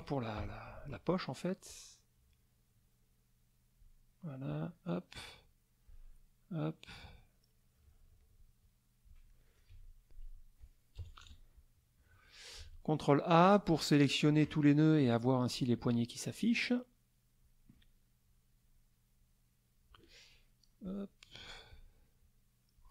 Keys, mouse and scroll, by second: 0.4 F6, 1.6-4.0 drag, 4.5-6.1 drag, 7.0-9.2 drag, 9.3 middle click, 9.3 click, 9.7 F2, 10.9 KP_Subtract, 11.2 KP_Add, 15.0 click, 15.8 click, 16.2-17.6 drag, 18.3 click, 19.1 click, 20.8 click, 21.7 click, 22.2 click.